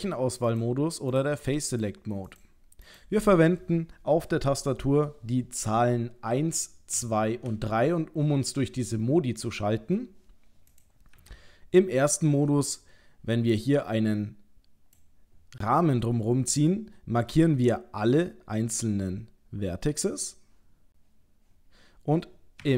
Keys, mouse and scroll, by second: 0.5 click, 1.7 click, 7.4 3, 10.7 click, 11.2 1, 12.8 click.